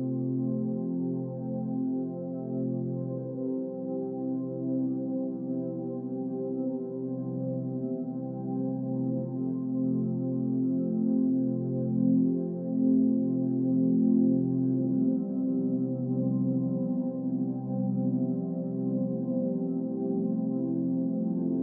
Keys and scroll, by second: 3.0 ctrl+=, 8.4 Down, 10.7 Right, 11.1 Left, 12.2 Down, 14.6 ctrl+-, 17.4 Delete.